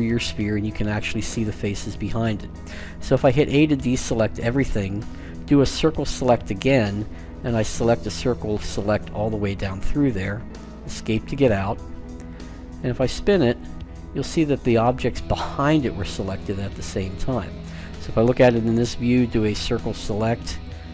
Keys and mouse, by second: 2.8 a, 4.9 c, 11.8-13.8 middle drag, 19.9 c.